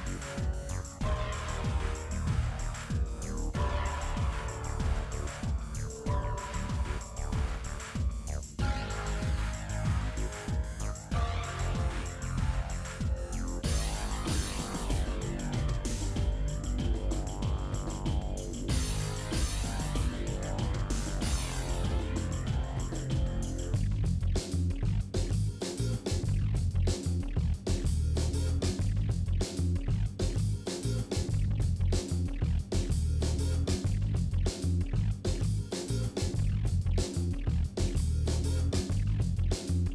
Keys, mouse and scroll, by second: 0.0-2.1 middle drag, 2.1 click, 3.1 click, 4.1 Tab, 4.5 click, 5.4 Tab, 5.7 click, 6.1 middle click, 6.8 click, 6.9-7.2 scroll up 1, 7.2 alt+click, 7.9 ctrl+b, 10.0-10.4 scroll down 3, 10.4 shift+middle click, 10.7 scroll up 3, 10.9 shift+middle click, 11.8-13.0 scroll down 3, 12.1 middle click, 12.4 shift+middle click, 13.0 click, 13.9-14.4 scroll up 1, 14.4 alt+click, 14.5 scroll up 2, 14.7 shift+middle click, 15.7 ctrl+b, 17.8 middle click, 18.7 ctrl+z, 19.1 shift+middle click, 19.4 alt+click, 19.6 scroll down 1, 19.8 scroll up 2, 20.0 shift+middle click, 20.2 KP_Decimal, 20.8 ctrl+alt+click, 21.4 ctrl+alt+click, 22.1 alt+shift+click, 22.9 ctrl+b, 24.6-25.7 middle drag, 26.2 middle click, 27.2 alt+shift+click, 28.4 ctrl+b, 29.2 middle click, 29.6 click, 29.9 l, 30.1 Delete, 31.6 Delete, 31.9 shift+middle click, 32.3 click, 32.6 l, 32.9 Delete, 33.6 Delete, 34.6 Delete, 34.8 middle click, 35.2 l, 35.6 Delete, 36.4 l, 36.6 Left, 37.0 KP_7, 37.9 click, 38.1 shift+middle click, 38.5 click, 39.0 shift+middle click, 39.4 shift+d.